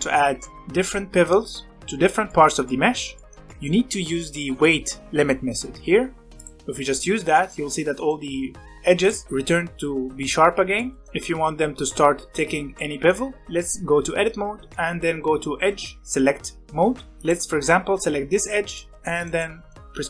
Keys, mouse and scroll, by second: 0.4-6.4 shift+middle drag, 6.4 click, 7.3-8.9 middle drag, 8.9 click, 9.2-10.5 scroll up 1, 10.5 scroll down 1, 10.7-11.8 middle drag, 11.8 2, 12.3 shift+middle click, 12.4 scroll up 1, 12.7-13.8 middle drag, 13.8 2, 14.6-17.1 scroll up 1, 17.1 click, 18.4-19.7 middle drag, 19.7 ctrl+click.